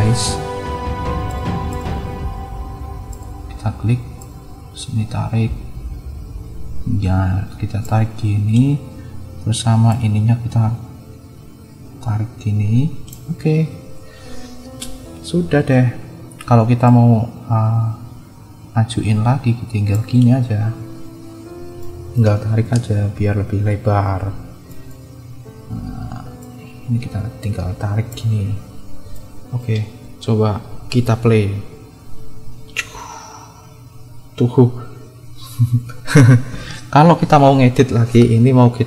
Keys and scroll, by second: 23.0 -, 30.8 space, 36.3 space.